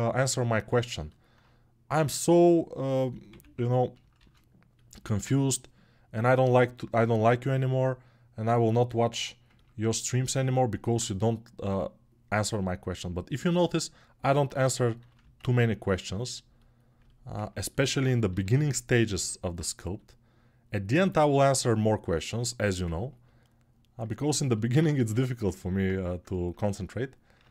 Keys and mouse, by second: 3.7 shift+l, 8.1-13.1 drag, 13.1-20.7 alt+middle drag, 20.7-24.1 alt+right drag, 24.1-27.5 alt+drag, 24.9 ctrl+Tab, 27.1 ctrl+Tab.